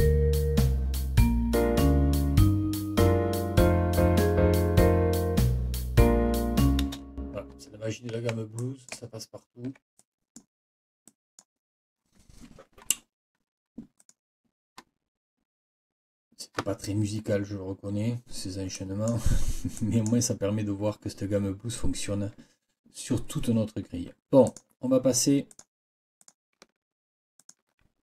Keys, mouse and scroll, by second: 6.8 space, 7.9 ctrl+scroll up 2, 8.6 ctrl+click, 9.4 ctrl+scroll down 2, 10.0 ctrl+click, 11.1 click, 14.0 click, 18.7 click, 18.9 scroll up 2, 18.9 click, 19.8 click, 24.5 click, 25.5 click, 26.2 click, 27.4 shift+click.